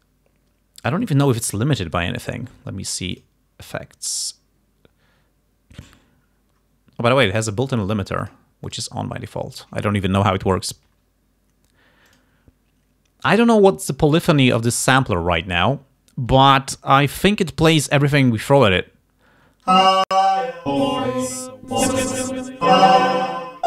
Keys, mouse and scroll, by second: 3.2 click, 8.3 click, 8.8 click, 12.2 click, 19.8 space.